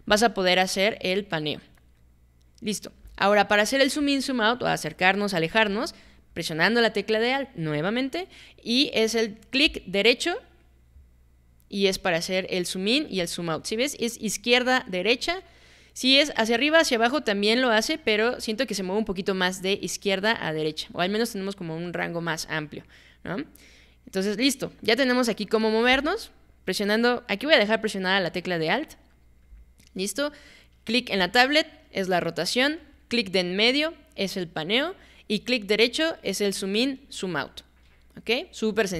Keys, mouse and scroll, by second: 0.3-2.8 alt+middle drag, 10.6-25.8 alt+right drag, 31.2-32.9 alt+drag, 33.3-35.1 alt+middle drag, 35.7-38.5 alt+right drag, 38.6 alt+middle click.